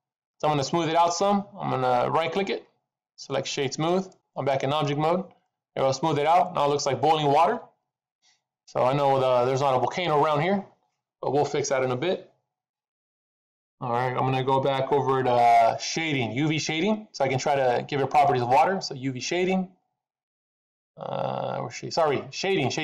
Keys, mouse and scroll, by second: 2.1 right click, 5.4 middle click, 6.7-7.1 scroll up 3, 7.1 middle click, 11.0-11.9 scroll down 1.